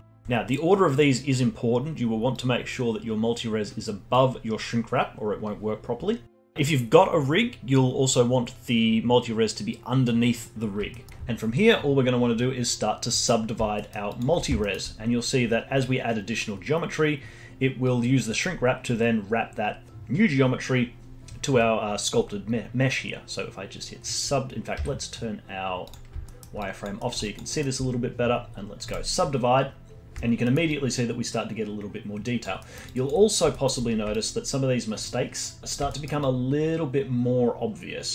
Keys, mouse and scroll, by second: 0.0-2.3 alt+middle drag, 2.3-4.1 drag, 6.2-6.5 scroll down 1, 6.5-8.9 scroll up 1, 10.9 alt+middle click, 13.8 middle drag, 14.1-14.6 alt+drag, 14.6-16.3 alt+middle drag, 16.3-17.1 scroll down 3, 17.1-18.4 scroll down 1, 18.4-19.6 scroll up 6, 24.7 z, 26.3-26.6 alt+middle drag, 26.6 alt+click, 27.0 alt+middle click, 27.2 alt+click, 27.5-28.9 alt+middle drag, 28.9-30.4 drag, 30.4 alt+middle drag, 30.7-32.6 alt+drag, 32.6 alt+middle drag, 32.9-33.2 alt+drag, 33.2 scroll up 1, 33.5 alt+middle drag, 33.8-34.1 scroll up 1, 34.1-36.0 alt+drag, 36.0 scroll down 2, 36.3-36.6 alt+middle drag, 36.6-38.1 alt+drag.